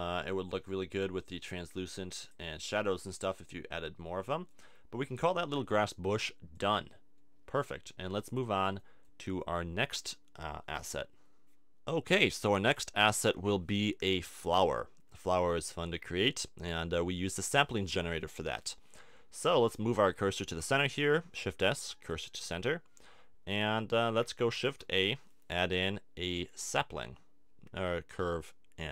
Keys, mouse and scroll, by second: 0.6-1.6 middle drag, 3.0 middle click, 6.5-8.4 drag, 8.6-11.4 middle drag, 12.2-13.8 drag, 13.8-15.2 middle drag, 19.2-20.4 middle drag, 20.4 shift+s, 24.5 shift+a.